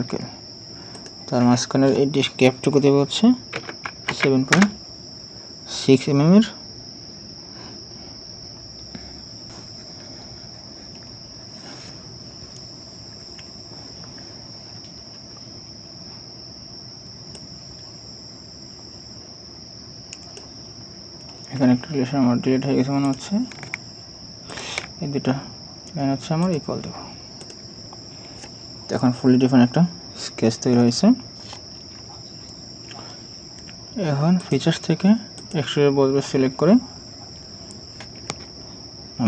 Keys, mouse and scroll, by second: 3.4 ctrl+click, 5.8 ctrl+click, 9.3-10.1 scroll up 1, 10.9-14.1 scroll down 1, 21.2 scroll down 1, 24.5 ctrl+click, 28.0 scroll up 1.